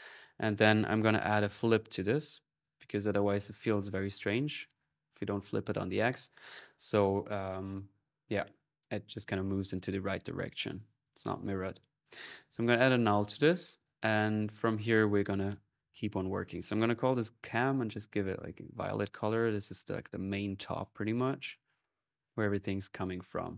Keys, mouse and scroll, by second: 0.3 right click, 0.6-1.9 typing, 2.4-3.4 drag, 3.7 click, 4.4 click, 5.0 middle click, 9.7 click, 10.5-13.3 typing, 10.8-15.0 ctrl+drag, 16.8-18.7 drag, 18.1-18.7 typing, 19.0-20.2 middle drag, 20.2 click, 21.4-23.5 typing, 21.6-23.5 alt+drag.